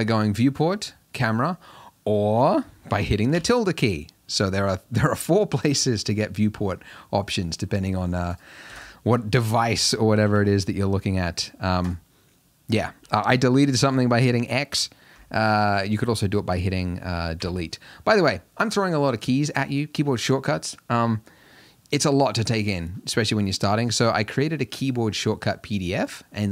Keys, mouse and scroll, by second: 1.2-1.8 drag, 1.8-2.2 middle drag, 2.2-2.6 scroll down 5, 4.7 `, 5.7-6.1 middle drag, 6.1-6.9 scroll down 4, 6.9-8.4 middle drag, 8.4 click, 8.8 x, 9.9 click, 10.4 s, 15.5 click, 16.2 click, 17.4 Delete.